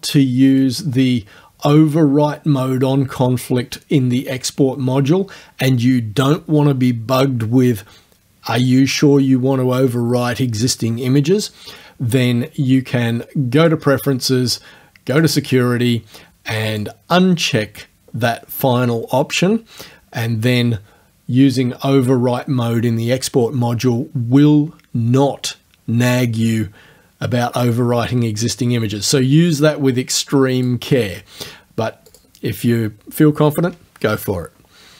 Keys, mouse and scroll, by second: 0.5 click, 13.6 click, 15.2 click, 16.7 click, 30.6 click, 32.1 click.